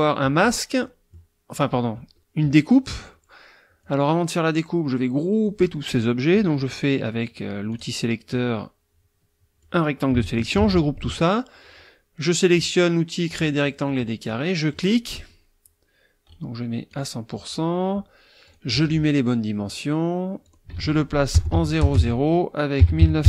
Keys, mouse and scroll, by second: 0.8 middle click, 3.8-5.7 drag, 7.7 click, 8.3-9.8 drag, 10.5 ctrl+g, 13.3 click, 13.6 middle click, 14.3 click, 16.3 right click, 16.9 click, 18.4 click, 20.5 ctrl+click, 20.7 ctrl+a, 21.5 Tab, 21.8-23.2 typing, 21.9 Tab.